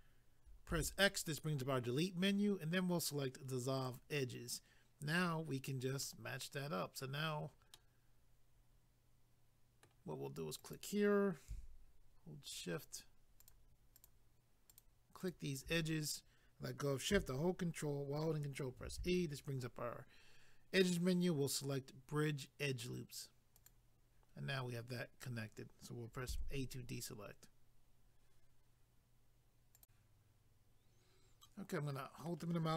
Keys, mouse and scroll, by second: 3.9 click, 6.0 middle click, 7.7 middle click, 10.6 click, 10.7 click, 12.5 shift+click, 12.6 shift+click, 13.4 shift+click, 13.5 shift+click, 13.9 shift+click, 14.1 shift+double click, 14.7 shift+click, 14.8 shift+click, 15.2 shift+click, 15.3 shift+double click, 18.8 ctrl+e, 23.5 click, 26.3 a, 29.8 click, 31.5 middle click.